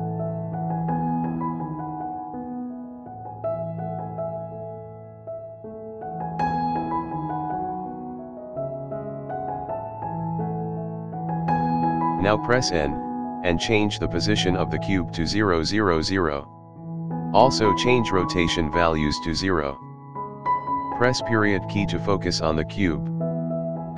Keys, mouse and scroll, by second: 0.5 scroll down 2, 0.6 scroll up 1, 0.7 middle drag, 1.0-1.3 scroll down 2, 1.1 scroll up 2, 1.7 g, 3.0-3.4 drag, 3.4 g, 4.2 shift+middle click, 4.5 scroll up 7, 4.8 shift+middle drag, 5.1 KP_Decimal, 5.3 scroll down 2, 5.5-6.0 middle drag, 6.0 scroll down 1, 6.2 r, 7.1 scroll up 3, 7.1 middle click, 7.5 g, 8.9 click, 9.1 g, 9.9 scroll down 1, 9.9-10.3 middle drag, 10.5 scroll down 2, 10.6 scroll up 1, 10.7 middle drag, 11.7-12.7 drag, 13.4-14.5 drag, 14.5 n, 15.3 click, 16.4 click, 17.5-18.5 drag, 19.3-20.4 drag, 20.5 KP_Decimal, 21.0 scroll up 1, 21.2-22.4 middle drag, 22.5 scroll down 2, 22.8-23.2 scroll up 3, 23.2 middle click.